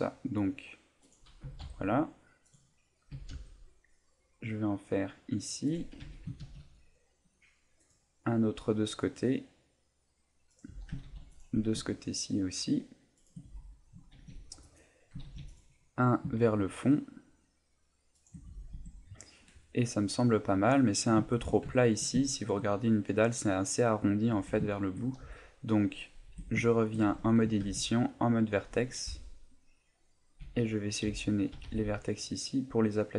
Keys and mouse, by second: 1.1 click, 1.4 s, 2.5 click, 3.1 s, 5.7 click, 6.0 a, 6.4 ctrl+r, 10.6 click, 10.7 a, 11.0 ctrl+r, 13.3 shift+click, 13.4 a, 14.1 ctrl+r, 14.8 right click, 15.2 ctrl+r, 18.3 shift+click, 18.5 a, 18.7 Tab, 20.0 middle click, 20.7 middle click, 21.3 shift+middle click, 21.8 shift+middle click, 22.2 shift+middle click, 24.3 Tab, 24.7 shift+middle click, 25.2 z, 25.8 middle click, 26.3 Tab, 26.7 middle click, 27.0 Tab, 27.6 ctrl+Tab, 29.1 b, 30.4 b, 31.0 z, 31.5 g, 33.0 click.